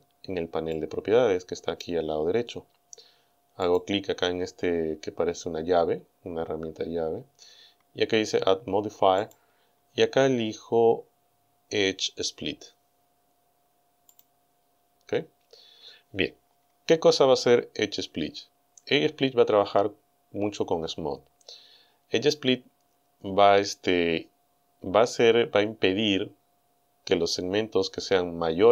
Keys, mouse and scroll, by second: 0.8-2.0 drag, 3.7 click, 9.2 click, 14.1 click.